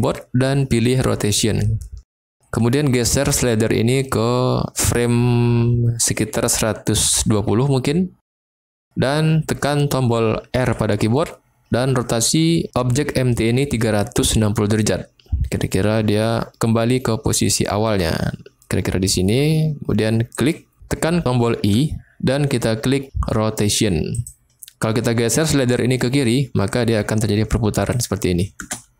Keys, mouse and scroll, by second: 3.5-7.2 drag, 10.6 r, 20.4 click, 21.6 i, 25.7-28.0 drag, 28.5 space.